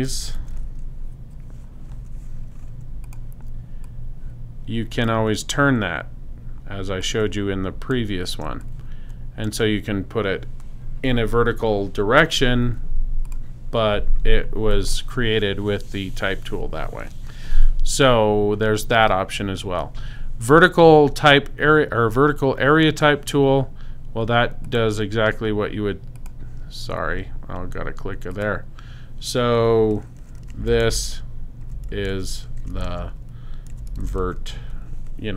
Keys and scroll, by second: 0.0-0.9 typing, 2.0 •, 2.8 super+., 30.4-34.9 typing.